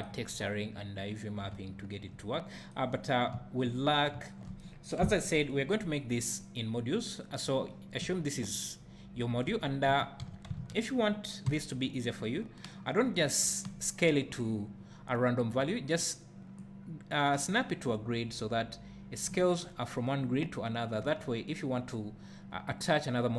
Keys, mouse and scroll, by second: 1.5 `, 3.5 `, 4.7 scroll down 2, 5.0 KP_7, 9.5 Tab, 9.9 1, 10.2 z, 10.6 alt+a, 11.5 b, 14.1-23.3 drag, 21.0 Tab.